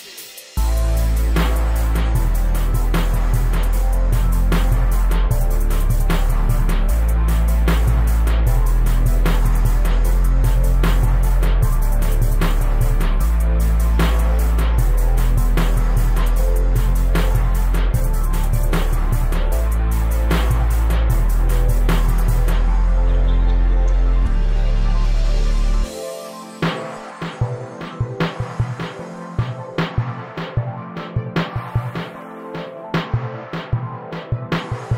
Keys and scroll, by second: 5.1 Escape, 13.9 space, 14.2 e, 19.0 space, 20.3 s, 22.6 space, 23.7 p, 25.9 2, 26.4 Return, 27.7 o, 29.4 space, 32.9 super+g.